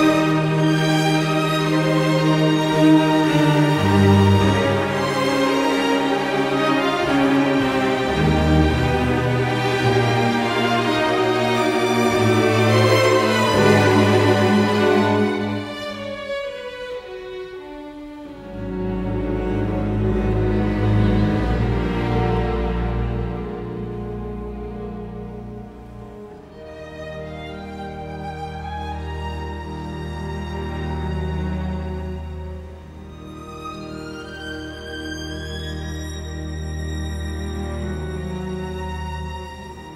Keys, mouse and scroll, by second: 12.9 F10, 16.9 Escape, 18.7 F10, 22.4 KP_1, 22.7 Return, 25.6 Escape, 27.1 Escape, 28.7 Escape, 29.8 Delete.